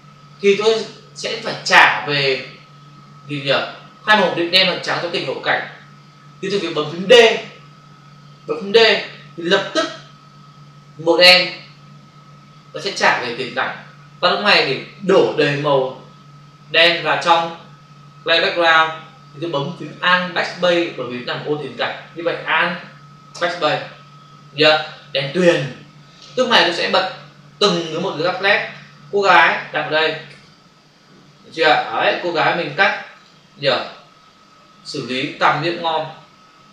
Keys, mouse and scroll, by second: 8.8 d, 23.2 alt+BackSpace, 28.0 click, 29.4 click, 33.1 click.